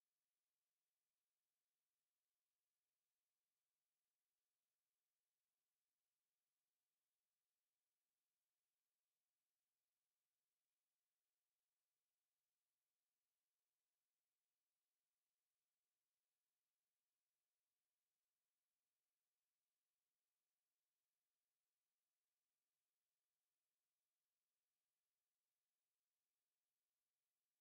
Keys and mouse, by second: 2.2 z, 3.9 s, 15.8 s, 22.7 middle click, 22.8 middle click, 23.7 middle click, 24.0 middle click.